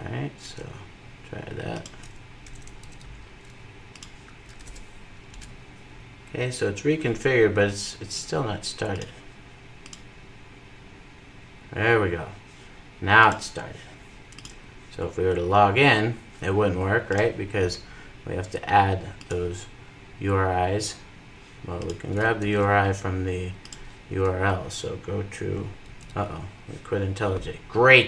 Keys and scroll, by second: 2.1 super+c.